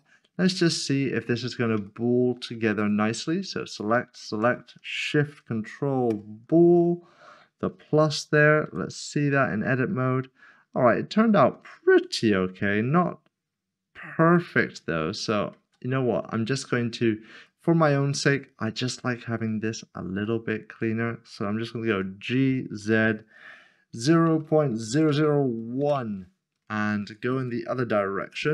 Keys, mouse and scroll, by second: 0.1-1.2 scroll up 1, 1.4 middle click, 1.9 shift+middle click, 4.2 shift+click, 6.0 ctrl+shift+[, 8.6 Tab, 9.6 middle click, 13.1-13.9 scroll up 1, 14.1 middle click, 14.6 ctrl+z, 15.6 ctrl+z, 16.3 ctrl+middle click, 16.7 scroll down 1, 17.4 middle click, 18.2 click, 20.2 middle click, 22.6 typing, 23.9-25.8 typing.